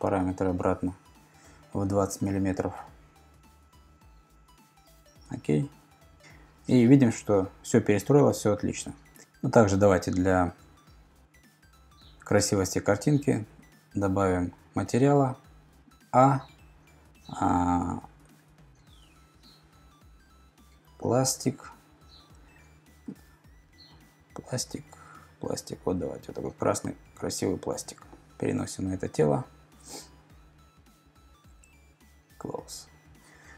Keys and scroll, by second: 1.6-2.5 typing, 4.2 typing, 20.4-21.4 typing.